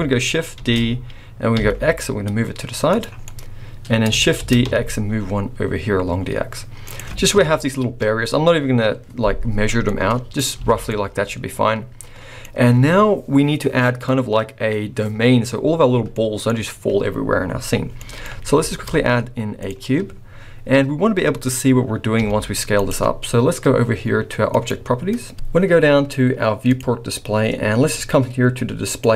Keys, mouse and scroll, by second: 0.6 shift+d, 3.1 scroll down 2, 3.3 middle click, 4.4 shift+d, 7.3 KP_1, 8.0-8.4 scroll up 2, 9.7 scroll down 4, 9.8 middle click, 10.6 alt+a, 10.9 middle click, 16.1 middle click, 18.0 middle click, 18.6 shift+a, 22.2 s, 24.5 click, 26.7 click, 27.3-28.9 scroll down 4, 28.9 click, 28.9-29.1 scroll down 1.